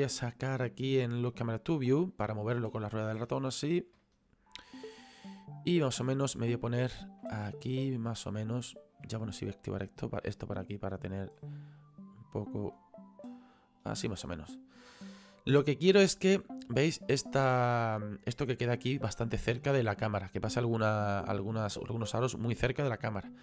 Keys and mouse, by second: 1.3 click, 4.0 shift+middle click, 6.0 middle click, 6.7 shift+middle click, 8.3 middle click, 9.8 click, 11.4 middle click, 12.7 shift+middle click, 15.2 click, 19.1 click.